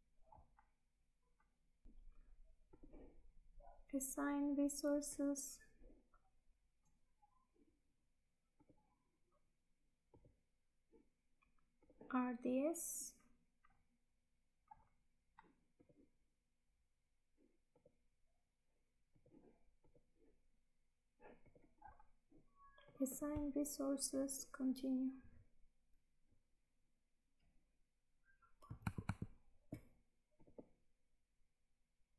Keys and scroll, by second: 28.9 alt+Tab.